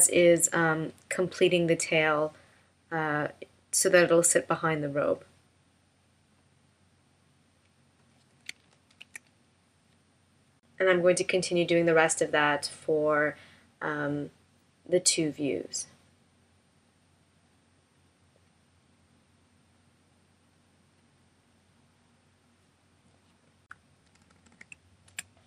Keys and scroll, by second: 8.9 shift+m, 24.1 super+=, 25.2 space.